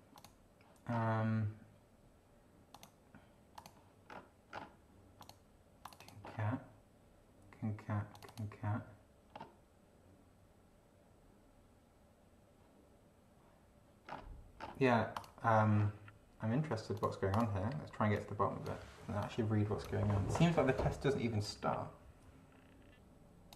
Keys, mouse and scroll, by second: 0.1 click, 0.9 scroll down 1, 2.7 click, 3.5 click, 4.1-4.8 scroll down 4, 5.2 click, 5.8 click, 8.1 click, 9.3 scroll down 2, 14.0-14.3 scroll down 2, 14.6 scroll down 2, 15.1 click, 15.8 scroll up 2, 16.9 click, 17.3 click, 18.1 click, 19.2 click, 21.5-23.5 drag.